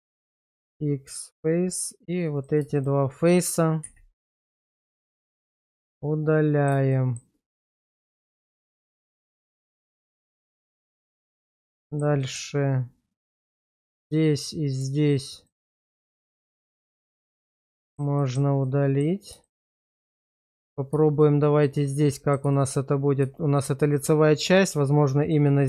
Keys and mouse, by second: 0.2 x, 3.9 x, 5.4 shift+middle click, 5.9 middle click, 6.9 shift+middle click, 9.6 middle click, 10.4 Tab, 10.9 shift+middle click, 11.9 shift+middle click, 12.2 middle click, 14.0 middle click, 15.0 shift+click, 15.4 shift+click, 16.6 ctrl+x, 17.4 shift+middle click, 17.8 shift+middle click, 18.2 shift+middle click, 18.7 middle click, 19.5 shift+middle click, 21.1 shift+click, 22.1 middle click, 22.5 shift+middle click, 24.6 shift+click, 25.2 shift+click.